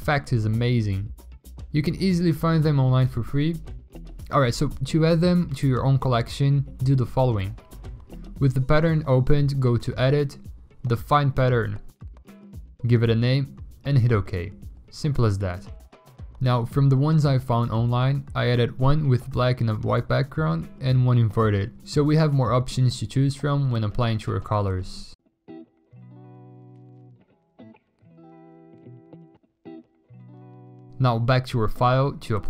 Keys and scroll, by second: 1.6 1, 3.3 ctrl+i, 5.3-6.3 typing, 8.0-8.7 typing, 13.4 1, 14.1 2, 16.0 ctrl+e, 16.6 ctrl+i, 19.8 1, 20.4 2, 23.5 w, 28.1 3, 29.1 ctrl+i, 31.1-32.2 typing.